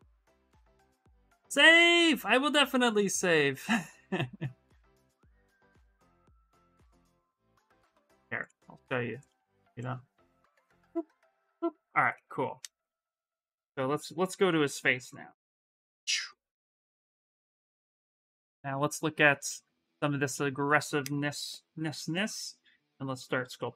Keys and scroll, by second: 17.2 s, 22.6 s.